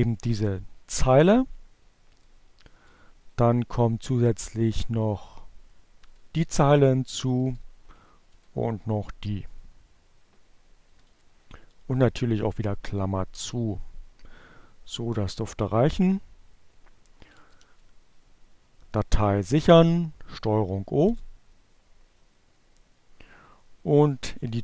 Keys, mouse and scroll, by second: 1.8 Down, 4.1 Up, 4.3 Right, 4.5 Delete, 5.3 Down, 6.7 Up, 9.3 Down, 9.4 Delete, 14.6 ctrl+o, 19.5 Return, 22.3 ctrl+x.